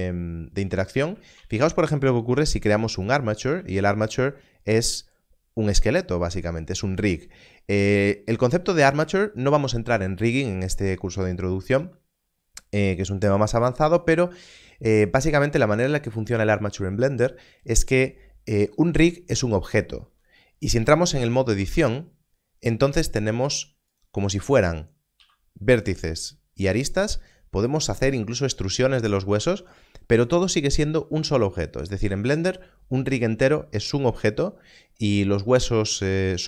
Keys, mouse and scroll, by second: 1.0 click, 1.3 shift+a, 2.9 click, 4.0 g, 4.0 click, 6.3 click, 8.6 click, 21.5 Tab, 22.7 click, 25.6 e, 25.7 click, 26.6 click, 29.3 click.